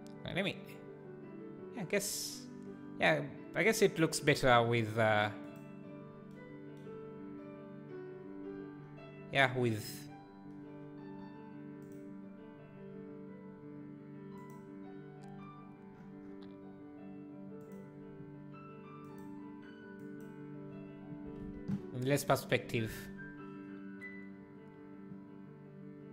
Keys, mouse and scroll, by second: 10.1 click, 12.2-19.0 drag, 21.4 alt+a.